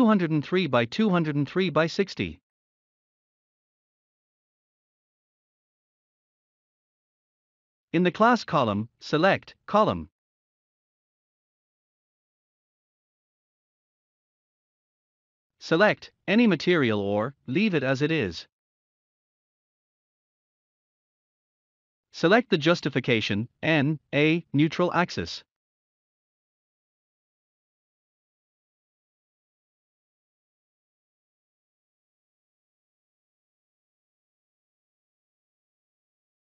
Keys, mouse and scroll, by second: 0.7 click, 1.5 scroll up 1, 1.8-3.7 scroll down 1, 6.2 click, 11.8 click, 11.8 click, 12.3 scroll up 1, 13.4 click, 18.5 click, 23.8 click, 25.4-27.2 scroll down 1, 27.5 click, 35.1-35.5 scroll up 1.